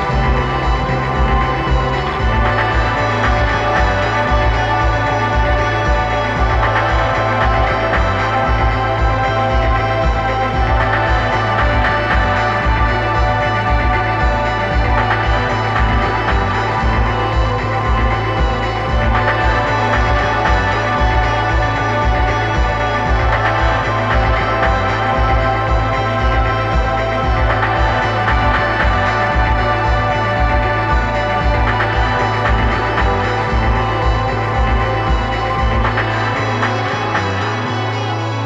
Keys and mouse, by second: 0.9-2.8 drag, 6.1-7.9 drag, 11.0 g, 16.6-20.0 drag, 20.5 g, 27.5 KP_1, 29.3 g, 37.8 KP_1.